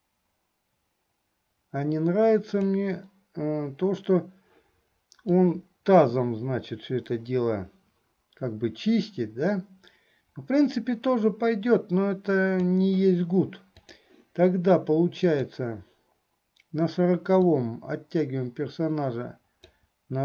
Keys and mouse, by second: 5.5-12.9 drag, 13.9 click, 15.3 click, 17.7-20.0 drag.